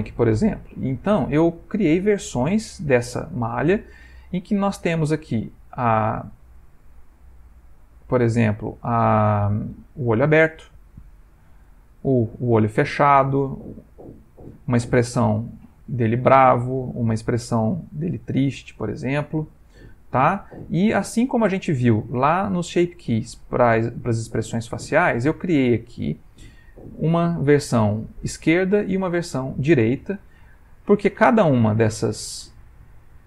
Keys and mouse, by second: 0.9 ctrl+middle click, 1.6 middle click, 2.5 Tab, 4.9 click, 6.4 middle click, 7.0 Tab, 8.4 click, 10.0 Tab, 10.7 Tab, 11.8 click, 12.3 Tab, 12.9 Tab, 14.0 click, 14.4 Tab, 15.2-15.6 middle click, 16.7 Tab, 17.9 click, 18.4 middle click, 18.9 Tab, 19.3 middle click, 20.3 Tab, 20.5 middle click, 20.6 middle click, 23.2 middle click, 27.0 click, 28.9 click, 31.5 click, 32.0 click, 32.6 click, 33.1 click.